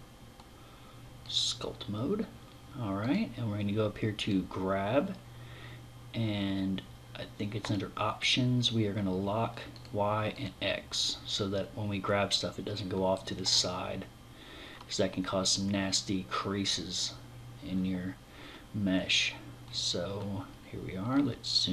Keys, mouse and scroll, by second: 2.6 click, 7.2 click, 9.3 click, 9.9 click, 20.0-21.7 scroll down 11.